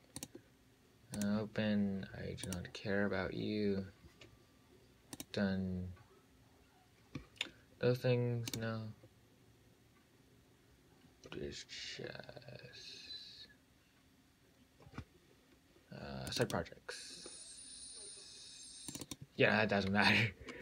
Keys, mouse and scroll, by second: 0.4-19.4 drag.